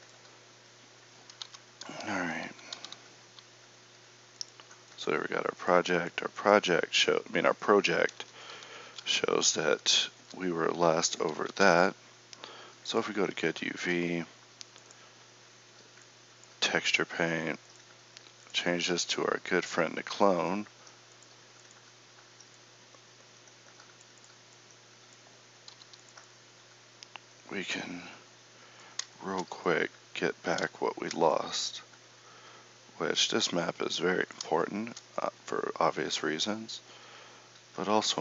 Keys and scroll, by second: 1.4 Tab, 2.7 alt+z, 8.1 KP_7, 11.5 ctrl+Up, 25.7 f.